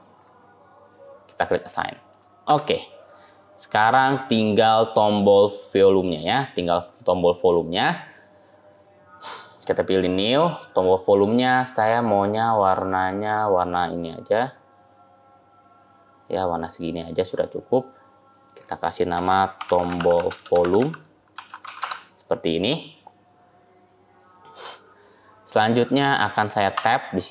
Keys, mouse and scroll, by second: 1.4 click, 2.3 Tab, 2.8-3.3 scroll down 3, 3.7 middle click, 3.7-4.2 scroll down 4, 4.2-4.6 scroll down 2, 4.2-5.2 scroll up 8, 5.2 shift+middle click, 6.7 scroll down 1, 7.2 scroll up 1, 7.3 click, 9.7 click, 18.2 click, 18.3 click, 24.0 click, 24.8 click, 26.6 Tab.